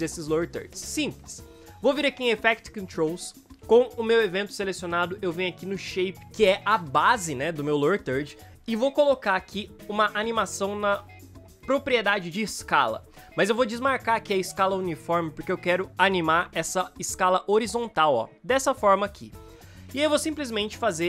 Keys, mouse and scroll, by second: 19.3 ctrl+z.